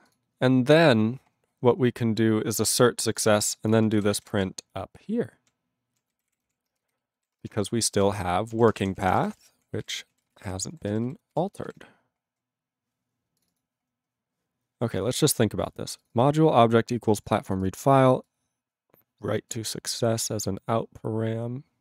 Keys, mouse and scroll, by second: 0.0 click, 0.1 click, 1.3-3.2 scroll down 10, 3.2 click, 3.7 click, 4.0 ctrl+g, 4.1 ctrl+a, 4.5-5.4 alt+p, 6.0 alt+p, 6.2 ctrl+n, 6.2 ctrl+o, 6.9 alt+f, 7.1 alt+b, 7.4 BackSpace, 7.4 BackSpace, 8.1 ctrl+e, 8.3 alt+b, 8.5 alt+d, 8.5-10.3 typing, 11.0 ctrl+s, 11.3 ctrl+g, 11.6 ctrl+s, 12.0-12.8 scroll up 8, 13.4 click, 13.4 click, 13.5 click, 13.6 click, 14.0 scroll up 1, 14.5 scroll, 16.0 click, 16.0 click, 16.1 click, 16.2 click, 17.1 click, 17.3 click, 17.4 click, 17.5 click, 17.6 click, 17.9 click, 18.0 click, 18.2 click, 19.5 click.